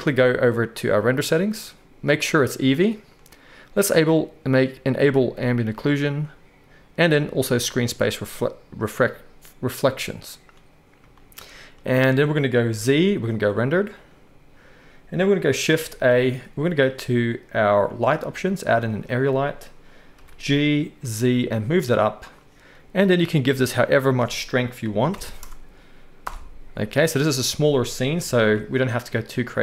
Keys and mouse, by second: 1.0 click, 2.2-4.0 drag, 7.6 click, 7.7-29.6 right drag, 12.7 z, 15.8 shift+a, 20.1 g, 23.1-29.6 drag, 23.1-29.6 middle drag, 28.1 g.